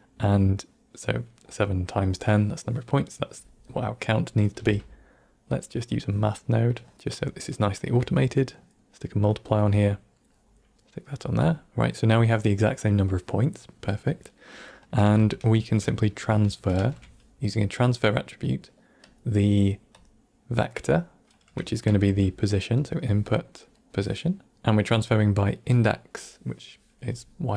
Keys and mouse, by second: 5.5 q, 6.6-6.9 drag, 7.4-8.6 drag, 9.3-10.1 drag, 10.6-10.9 drag, 11.4-11.8 drag, 14.0 middle click, 14.6 middle click, 15.2-15.7 ctrl+middle drag, 15.9 middle click, 16.7 shift+a, 19.9-20.8 drag, 21.8 shift+a, 24.9-25.7 drag.